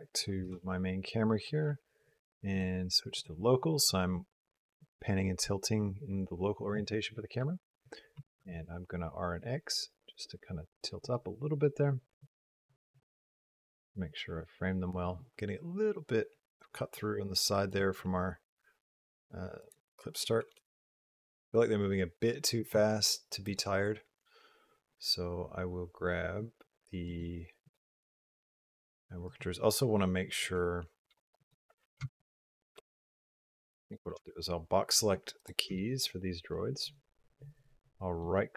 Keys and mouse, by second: 0.4 Down, 2.3 click, 8.2 r, 12.2-15.0 drag, 17.5 click, 19.4-20.9 drag, 20.9 space, 22.5 space, 23.3 click, 26.9 click, 27.5 click, 29.1 click, 30.2 click, 30.8 shift+click, 31.9 shift+click, 32.3 shift+click, 33.6 click, 34.0 b, 35.2 click, 35.5 b, 38.0-38.5 drag.